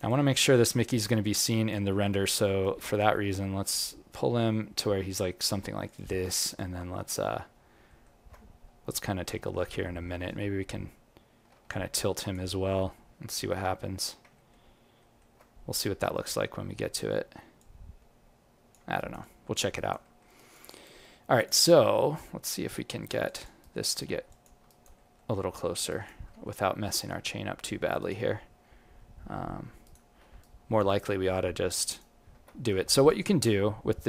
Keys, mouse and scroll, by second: 0.0 alt+click, 2.2 ctrl+middle click, 2.9 alt+middle click, 3.7 g, 6.3 alt+click, 6.9 ctrl+middle click, 8.5-9.2 scroll up 5, 9.3 alt+middle click, 11.7 alt+click, 13.2 click, 14.3 ctrl+middle click, 14.9 ctrl+middle click, 15.9 scroll up 1, 17.5 click, 17.5 scroll up 1, 18.9 alt+right click, 19.2 alt+click, 19.7 alt+right click, 20.0 alt+middle click, 20.3 alt+right click, 20.6 alt+click, 21.3 click, 22.1 right click, 23.2 alt+click, 23.6 right click, 24.2 click, 24.6 alt+right click, 24.9 alt+middle click, 25.8 alt+right click, 26.2 alt+middle click, 26.7 g, 28.8 g, 30.4 alt+right click, 31.0 right click, 32.7 q, 33.0 alt+click.